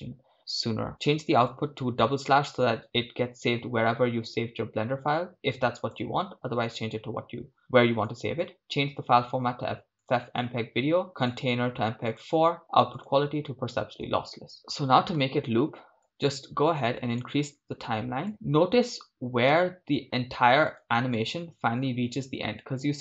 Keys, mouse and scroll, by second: 2.4 scroll down 1, 5.8-8.5 drag, 5.8 scroll down 3, 10.0-10.3 drag, 10.0 scroll down 1, 11.2 scroll down 1, 11.2-14.5 drag, 16.1-17.3 drag, 19.6 shift+space, 21.6-23.0 drag.